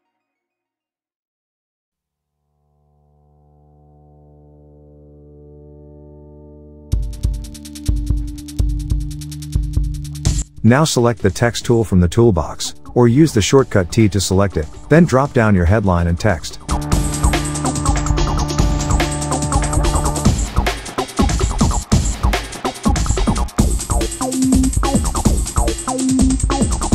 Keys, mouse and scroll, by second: 1.5 ctrl+g, 2.3 click, 3.4 alt+scroll down 1, 3.7 click, 8.8 alt+scroll up 1, 9.4 alt+scroll down 1, 9.7 click, 12.7-14.9 typing, 16.0 ctrl+shift+., 19.1 click, 21.0-22.3 typing, 22.4 Down, 24.0 Return, 25.0 click, 25.5-25.9 shift+click.